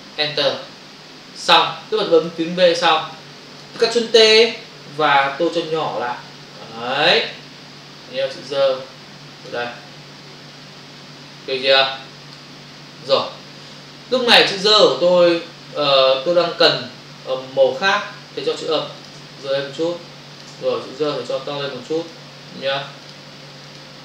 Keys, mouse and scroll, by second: 0.2 Return, 2.2 click, 3.2 click, 5.5 shift+click, 7.8 click, 10.1 Return, 11.2 click, 19.0 ctrl+click, 19.4 click, 21.1 ctrl+click, 22.0 ctrl+click, 23.1 ctrl+click, 23.7 ctrl+double click.